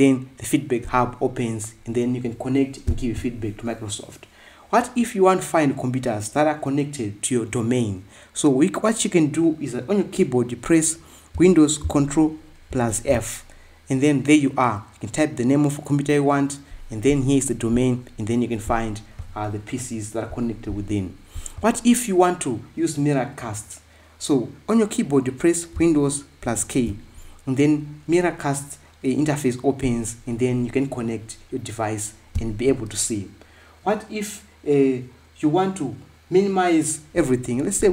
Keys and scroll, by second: 13.5 ctrl+super+f.